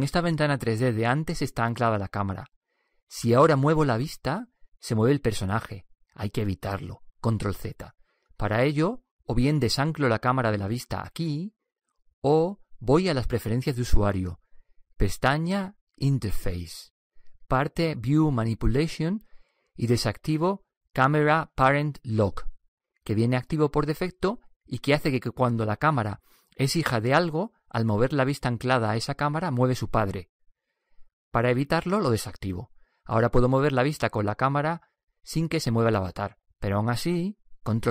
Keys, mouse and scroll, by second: 1.0 n, 3.9-5.9 middle drag, 8.1 ctrl+z, 34.5-36.5 middle drag.